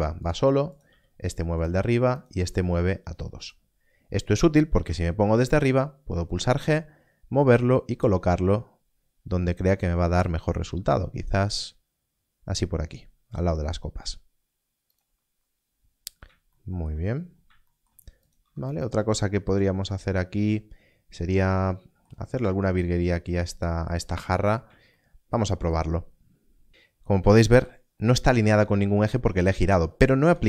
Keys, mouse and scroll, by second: 0.2 right click, 0.7 click, 1.5 g, 1.6 right click, 2.1 click, 2.5 g, 3.4 right click, 4.8 KP_7, 5.5 scroll down 1, 14.9 click, 17.0 scroll down 1, 18.2 click, 18.3 Tab, 24.1 scroll up 1, 26.3 scroll up 1, 27.5 Tab, 30.2 KP_7.